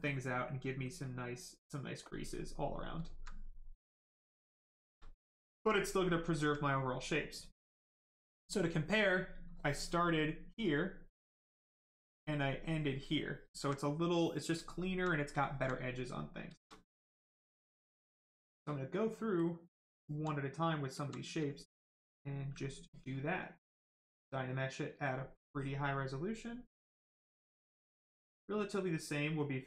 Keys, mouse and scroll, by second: 2.3 right click, 3.0 alt+right click, 3.5 right click, 3.6 right click, 4.7 shift+right click, 5.0 alt+right click, 5.9 right click, 5.9 right click, 6.3 alt+right click, 9.4 click, 13.5 alt+right click, 14.5 alt+right click, 14.6 alt+right click, 15.7 right click, 15.7 right click, 16.5 shift+right click, 16.7 alt+right click, 17.3 click, 19.8 alt+right click, 20.3 right click, 20.4 right click, 20.9 alt+right click, 21.3 alt+right click, 21.7 right click, 21.7 right click, 22.8 click, 25.5 click.